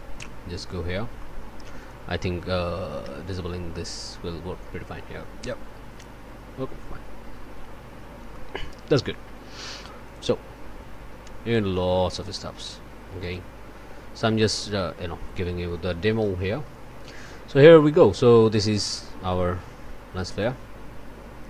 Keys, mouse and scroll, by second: 0.6 click, 1.1 click, 1.8 click, 3.0 d, 4.0 d, 7.7 middle click, 7.7 scroll down 1, 8.3 click, 10.0 click, 12.2 click, 13.2 click.